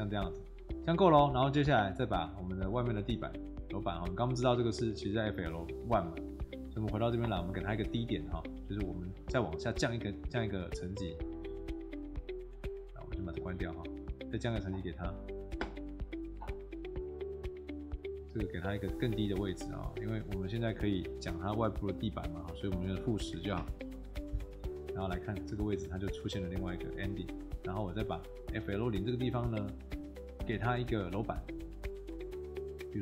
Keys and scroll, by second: 5.9 Escape, 8.3 Escape, 18.8 Escape, 21.1 0, 22.6-23.8 typing.